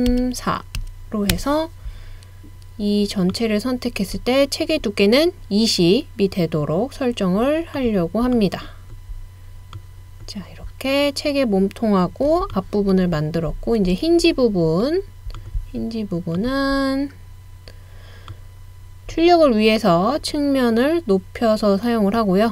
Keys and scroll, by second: 0.0-0.6 typing, 1.4 Return, 1.8-2.5 typing, 11.7 typing.